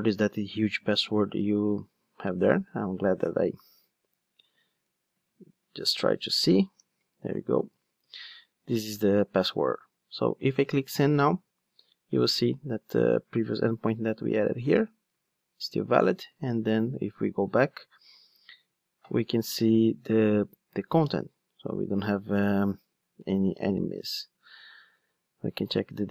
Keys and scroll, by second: 4.6 super+c, 13.8 alt+super+r, 15.2 ctrl+Tab.